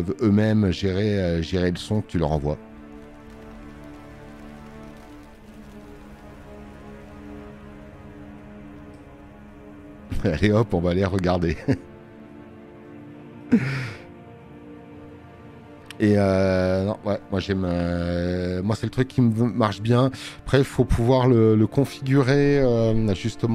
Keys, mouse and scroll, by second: 18.1 space, 18.3 click, 19.3 alt+scroll down 2, 19.9 alt+scroll down 2.